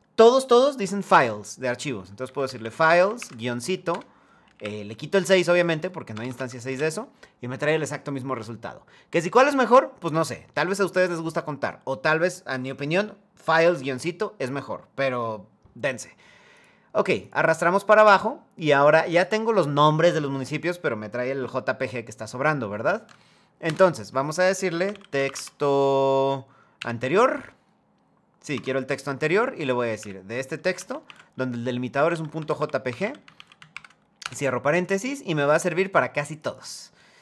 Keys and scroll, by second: 3.6 Return, 4.2 Up, 5.8 BackSpace, 6.0 BackSpace, 6.3 Return, 26.5 Down, 28.2 Tab, 29.7 Left, 32.6 BackSpace, 33.9 Return.